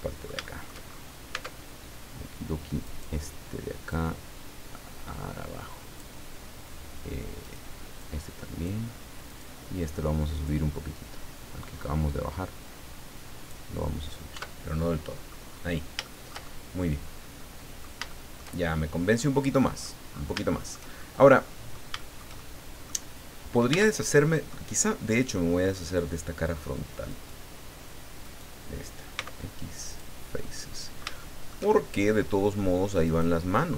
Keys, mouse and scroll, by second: 0.9-1.2 shift+scroll up 2, 1.3 Tab, 2.8 right click, 3.9-6.2 drag, 7.4 right click, 8.0 click, 9.3 right click, 10.4-11.8 drag, 11.8-12.2 scroll up 1, 13.8 scroll down 1, 14.3 Tab, 14.8 middle click, 15.5-15.9 scroll down 1, 16.0-18.0 shift+middle drag, 18.1 shift+middle click, 18.6-20.0 shift+middle drag, 20.5 shift+middle click, 21.4 middle click, 22.0 shift+middle click, 22.8 middle click, 23.7 Tab, 24.2 middle click, 26.0 click, 27.1 right click, 28.2 right click, 29.1 x, 29.9 click, 30.4 middle click, 31.7 shift+middle click, 33.0 middle click.